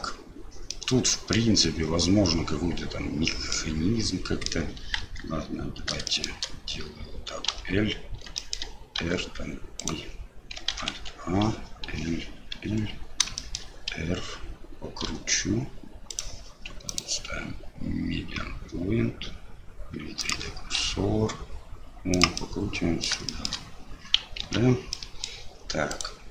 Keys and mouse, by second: 0.7 middle click, 3.5 middle click, 5.0 KP_1, 6.1 shift+middle click, 7.5 l, 8.4 shift+middle click, 9.0 r, 10.7 alt+a, 11.9 l, 13.4 shift+click, 15.1 r, 16.9-20.4 drag, 22.4 middle click, 23.4 shift+middle click, 23.4 shift+click, 24.4 ctrl+z, 25.0 click, 25.0 middle click, 25.9 click.